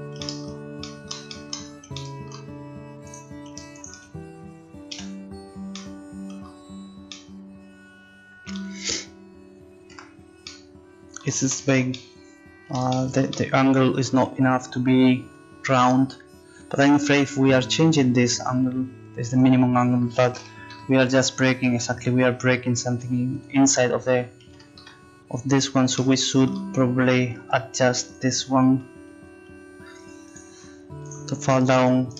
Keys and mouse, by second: 1.4 middle click, 3.1-4.2 drag, 4.9 f, 8.2 click, 9.9 Tab, 16.8-21.5 drag, 23.3-26.1 drag, 27.4 Tab, 27.7 click, 28.0-30.3 right drag, 30.3-32.1 drag, 31.8-32.1 right drag.